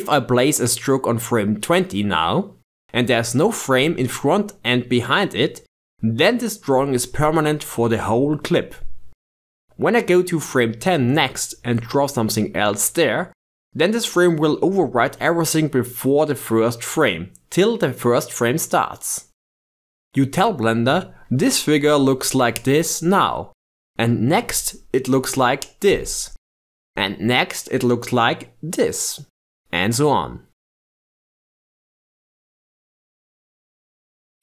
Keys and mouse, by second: 11.6-12.8 drag, 15.9-17.1 drag, 20.8-22.7 drag, 24.7-27.8 drag, 28.8 click, 30.6-31.3 drag, 32.5 click, 32.7 shift+space, 33.2 shift+space, 33.4 click.